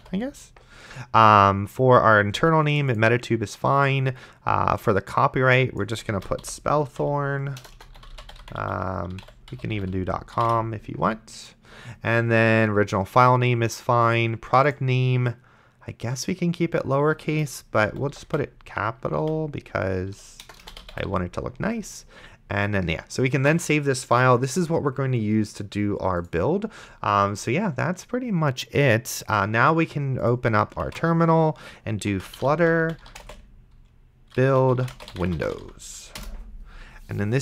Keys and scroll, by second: 0.0-0.5 typing, 6.2-10.7 typing, 17.8-21.6 typing, 23.6 ctrl+s, 31.1 ctrl+`, 31.9-36.1 typing, 36.2 Return.